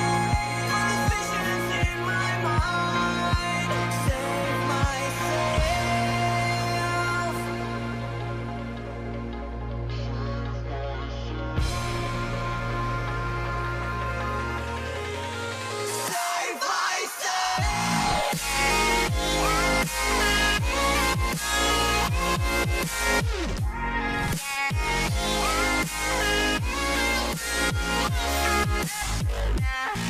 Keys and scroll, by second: 11.7 ctrl+j.